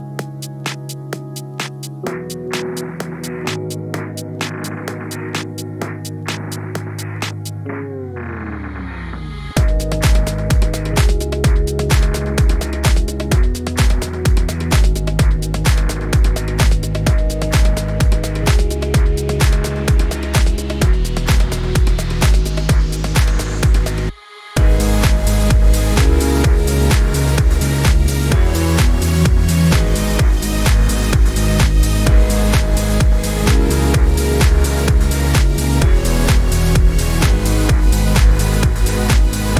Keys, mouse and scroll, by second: 0.9 click, 1.1 click, 1.4 click, 1.5 -, 1.5 click, 1.7 click, 1.7 -, 2.0 click, 3.0 click, 3.5 click, 3.7 click, 4.8 click, 5.2 click, 5.3 click, 5.6 click, 6.6 drag, 6.7 drag, 7.0 drag, 7.2 drag, 7.3 click, 7.7 click, 7.9 click, 8.0 click, 8.1 click, 8.5 click, 9.0 click, 9.3 -, 9.4 click, 9.9 click, 10.1 drag, 10.4 drag, 10.6 click, 11.0 click, 11.1 drag, 11.4 click, 11.6 click, 11.7 click, 11.9 ctrl+d, 12.1 shift+click, 12.3 click, 12.4 drag, 12.6 click, 12.7 click, 13.0 click, 13.5 click, 14.1 -, 14.2 click, 14.6 click, 14.8 click, 15.1 -, 15.2 click, 15.9 drag, 16.7 click, 17.6 click, 17.9 click, 18.6 click, 18.8 click, 19.4 ctrl+z, 19.5 click, 20.7 click, 21.0 click, 21.2 click, 21.4 right click, 22.7 click, 22.9 click, 23.2 click, 23.7 click, 24.2 click, 24.9 click, 25.3 drag, 25.7 click, 26.2 click, 26.9 click, 27.1 click, 28.2 click, 28.3 click, 28.6 click, 29.0 middle click, 29.4 drag, 30.4 click, 30.6 click, 30.8 -, 30.8 middle click, 31.5 click, 33.1 middle click, 33.5 click, 34.0-34.6 drag, 34.8 click, 35.1 drag, 35.4 click, 35.5 click, 36.0-36.5 drag, 36.9 click, 37.1 click, 37.6 Delete, 38.1 click, 38.5 click, 38.8 click, 38.9 click, 39.0 click, 39.4 click.